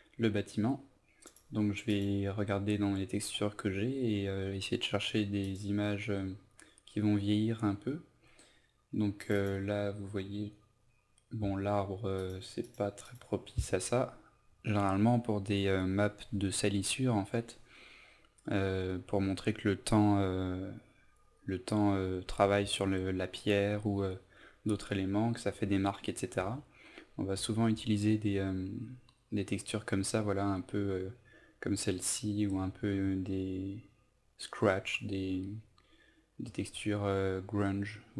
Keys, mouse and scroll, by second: 26.4-28.2 typing, 31.4-33.0 typing, 36.4 Right, 36.7 typing.